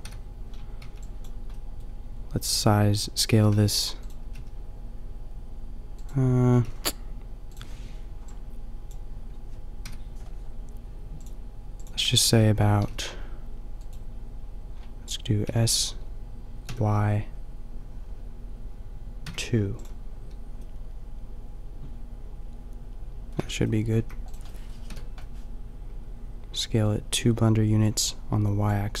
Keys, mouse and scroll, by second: 0.0 KP_5, 0.8 b, 3.4 s, 4.1 s, 9.8 KP_5, 11.8 KP_5, 12.7 s, 13.9-18.9 drag, 20.6-23.3 middle drag, 23.3 Tab, 23.9 a, 24.3-27.2 middle drag, 24.8 KP_5.